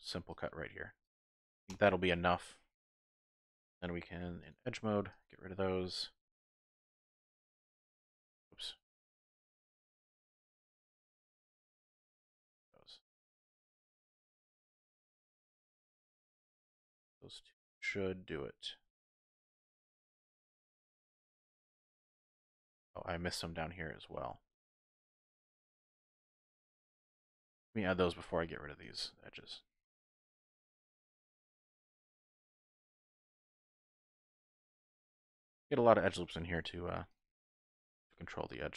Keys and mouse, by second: 4.0 2, 4.5 alt+click, 5.2 alt+shift+click, 5.9 alt+shift+click, 7.1 alt+shift+click, 10.2 typing, 10.6 click, 11.1 middle click, 11.3 click, 16.6-22.9 middle drag, 23.5 shift+middle click, 25.1 middle click, 25.6 middle click, 26.7 ctrl+r, 28.2 click, 28.4 ctrl+r, 30.0 click, 30.4 ctrl+r, 31.9 click, 32.4 ctrl+r, 34.0 click, 34.9 shift+click, 36.6 ctrl+r, 37.8 click, 38.0 ctrl+r.